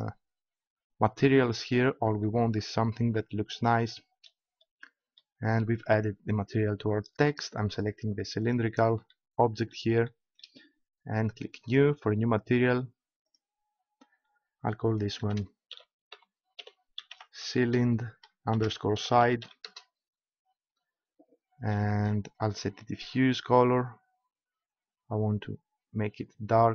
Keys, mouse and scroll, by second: 2.9-6.6 middle drag, 8.4 right click, 8.9 click, 11.7-16.2 drag, 22.9-24.7 drag.